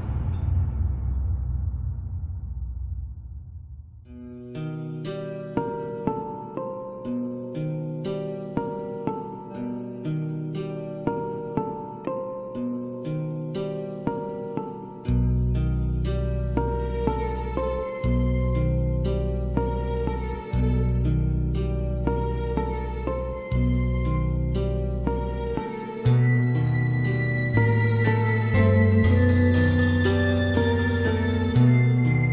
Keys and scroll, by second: 2.4 Delete.